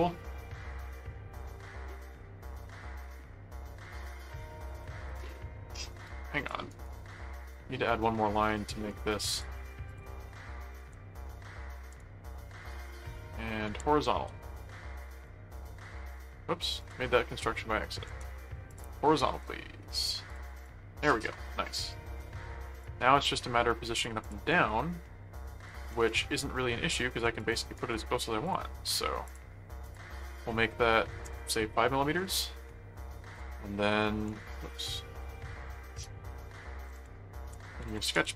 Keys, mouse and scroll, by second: 5.0 click, 5.9 right click, 6.4 click, 6.7 right click, 7.5 click, 8.4 click, 9.3 ctrl+click, 10.8 alt+a, 11.9 alt+c, 12.4 alt+h, 13.7 alt+h, 15.2 click, 16.0 click, 16.8 click, 18.1 alt+c, 18.7 click, 20.3 click, 21.3 middle click, 22.8 click, 24.2 click, 24.5 right click, 25.0 middle click, 26.4 click, 27.4 click, 27.7 right click, 28.4 click, 29.3 click, 30.1 click, 33.6 ctrl+1, 34.6 ctrl+4, 36.0 click, 37.0-38.3 typing.